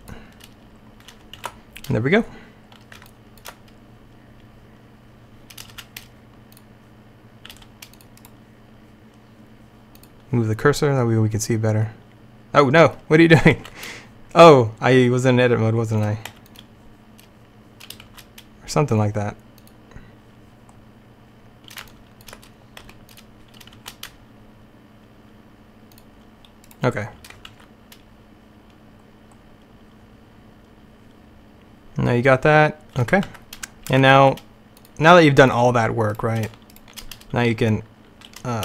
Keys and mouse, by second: 1.5 alt+a, 5.8 shift+a, 7.7 g, 8.3 click, 10.1 click, 11.1 click, 13.7 alt+a, 16.4 x, 18.2 shift+a, 22.9 x, 23.9 shift+a, 27.6 alt+a, 29.1 middle click, 33.4 alt+a, 36.9 shift+right click.